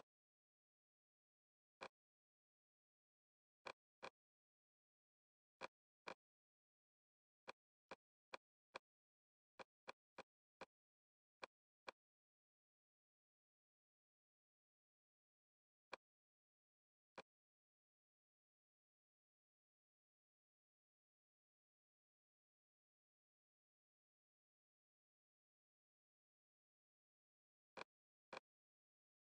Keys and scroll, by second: 2.5 super+Tab.